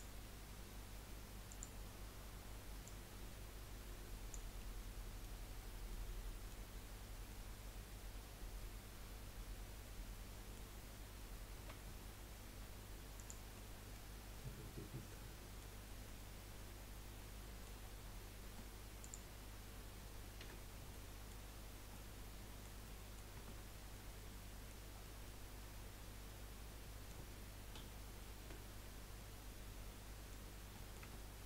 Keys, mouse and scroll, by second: 2.8 click, 4.6-5.6 middle drag, 5.6-6.2 scroll down 2, 6.2 middle click, 6.7-7.3 scroll up 1, 7.3-10.3 middle drag, 11.7 s, 13.5 middle click, 14.2 scroll down 5, 14.4-15.9 middle drag, 15.9 scroll up 3, 16.0-18.0 middle drag, 18.0-18.4 scroll down 4, 18.4 Tab, 19.0 click, 20.4 h, 20.9-21.4 middle drag, 21.4-21.9 scroll up 2, 21.9-23.3 middle drag, 23.3 Tab, 23.6-23.9 scroll up 4, 23.9-24.9 middle drag, 24.9-25.2 scroll down 4, 25.2-27.7 middle drag, 27.7 z, 29.2-30.5 middle drag, 30.5 scroll up 2, 30.7 middle click, 31.0 Tab, 31.2-31.4 scroll up 2.